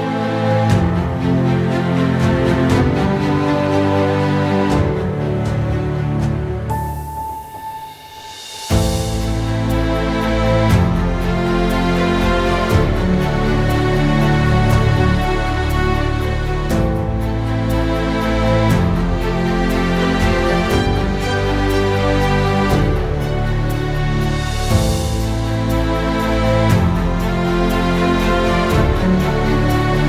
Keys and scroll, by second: 0.0-14.7 typing, 16.2-25.6 typing, 26.9-30.0 typing.